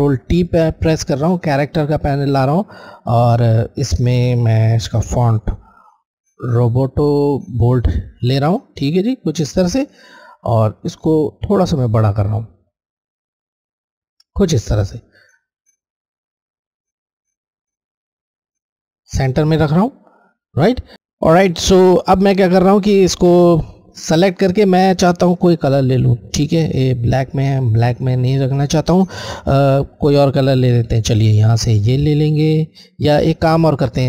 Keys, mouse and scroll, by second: 2.9 click, 4.9 r, 7.3-8.1 typing, 7.7-11.6 drag, 12.2 shift+click, 12.3 shift+click, 14.3 click, 16.8 shift+click, 17.1 shift+click, 22.7 click, 25.5 click.